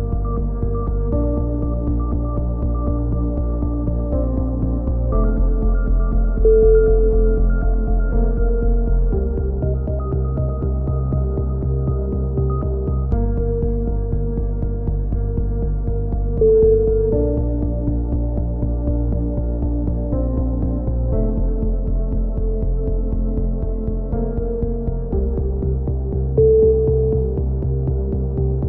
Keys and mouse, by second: 0.0 click, 0.4 z, 0.9 click, 0.9 z, 1.6 click, 2.0 z, 2.4 click, 2.4 z, 2.6 middle click, 2.9 z, 3.6 click, 4.3 z, 4.5-6.3 drag, 5.5 z, 6.3 z, 7.1 click, 7.5 click, 7.9 middle click, 8.3 click, 9.4 z, 9.7-10.8 drag, 11.5 a, 11.7 z, 12.2 click, 13.9 ctrl+KP_7, 14.3 z, 15.4 z, 15.6 z, 15.9 click, 16.7 click, 16.9 KP_3, 17.5 z, 17.9-19.7 drag, 19.8-21.2 right drag, 21.6 KP_3, 22.1-23.3 middle drag, 24.6 click, 27.0-28.5 drag.